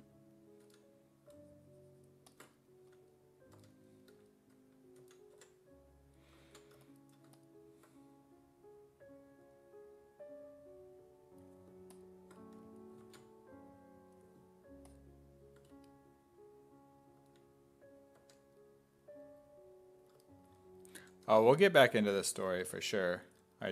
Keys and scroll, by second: 0.0-0.7 typing, 2.7-3.6 typing, 5.0 s, 5.4 5, 6.5 ctrl+z, 12.6 s, 13.1 ctrl+z, 17.2 s, 18.2 1, 21.0-23.7 typing.